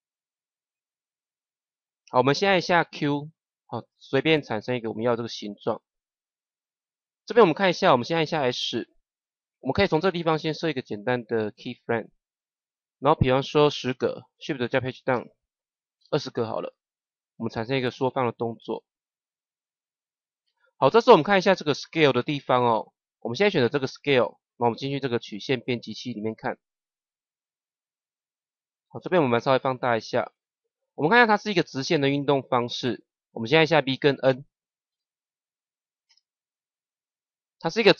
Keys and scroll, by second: 2.7 q, 8.6 s, 15.0 shift+Page_Down, 34.8 n, 36.0 KP_0.